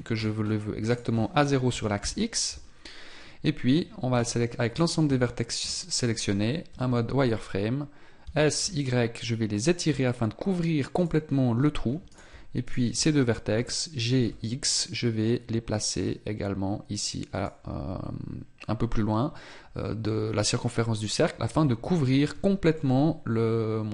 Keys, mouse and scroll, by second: 0.8 click, 4.1 shift+right click, 6.6 z, 12.0 right click, 12.6 shift+right click, 13.4 g, 21.4 Tab, 22.3 z, 22.7 middle click.